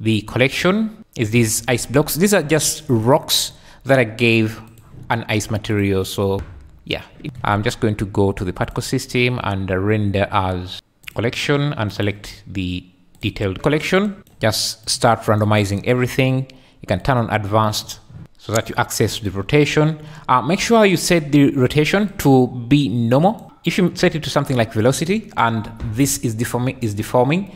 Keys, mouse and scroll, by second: 8.7 click, 10.7 click, 12.0-13.3 drag, 14.2 click, 14.2 `, 14.8 click, 17.0 click, 18.6 click, 19.7-20.1 drag, 22.1-24.6 drag.